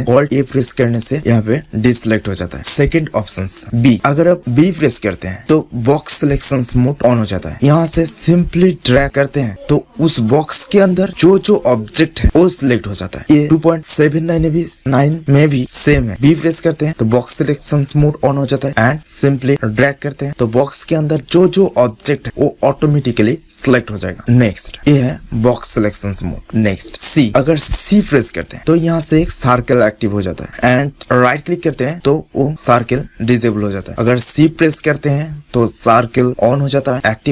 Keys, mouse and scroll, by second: 0.1 alt+a, 1.5-2.5 drag, 2.5 middle click, 26.8-30.4 drag, 30.4 right click.